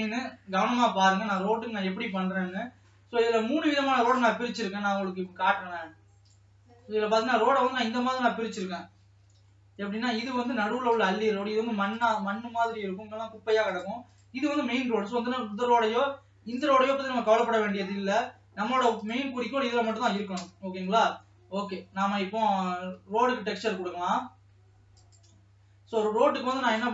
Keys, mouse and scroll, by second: 1.2 Tab, 1.6-3.6 drag, 3.6 scroll down 2, 4.2-5.4 middle drag, 5.4-6.3 scroll down 3, 6.3 click, 6.7-7.3 scroll down 7, 7.3-9.0 middle drag, 9.0 alt+h, 9.6 middle click, 10.3 alt+a, 10.6 middle click, 10.9-12.0 scroll up 2, 12.0 click, 13.8 click, 14.6 click, 14.8 scroll down 1, 15.2 middle click, 16.0-16.5 scroll up 2, 16.8-17.8 drag, 17.8 scroll up 2, 18.6 scroll down 2, 19.2 click, 20.3 KP_0, 22.6 Tab, 23.1 Tab, 25.1-26.9 drag.